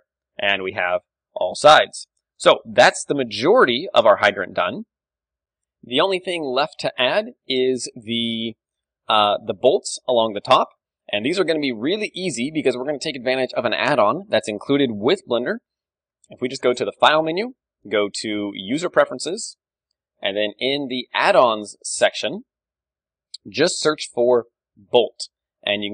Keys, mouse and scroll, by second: 0.0 a, 1.7 KP_1, 2.9 ctrl+w, 3.5 middle click, 6.0-10.9 middle drag, 10.9 KP_7, 11.9-15.7 middle drag, 12.9 d, 13.1-15.0 drag, 14.0 d, 16.6-18.6 drag.